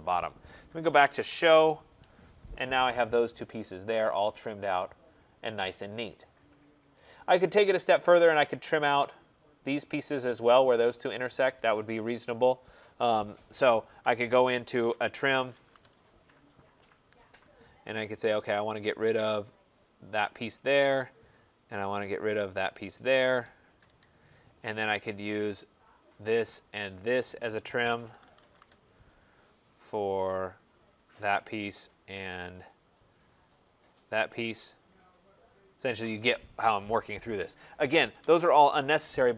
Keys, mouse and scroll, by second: 0.5-1.5 typing, 2.4 click, 2.8-3.6 scroll, 3.8-4.6 typing, 6.8 right click, 7.3-7.9 scroll, 8.2 click, 9.1 click, 9.9 middle click, 10.8 click, 12.9 right click, 13.4 middle click, 13.4 middle click, 13.5 middle click, 14.9-15.9 typing, 17.2 middle click, 17.6 scroll, 18.3 right click, 19.5 click, 19.7 middle click, 21.6 right click, 22.7 click, 23.5 Escape, 23.8 Escape, 25.3 right click, 25.8 click, 26.8 shift+click, 27.9-28.8 typing, 31.0 click, 32.5 typing, 32.6 right click, 34.5 scroll, 36.1 right click, 37.2 Return, 37.9 Escape, 38.1 Escape, 38.4-38.8 scroll.